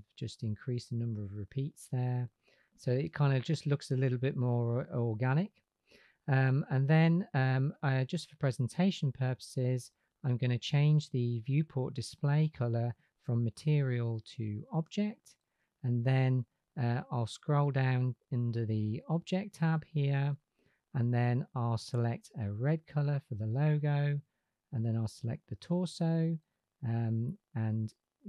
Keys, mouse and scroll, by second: 0.1-2.0 drag, 8.4-15.2 drag, 21.3 click, 24.1 click.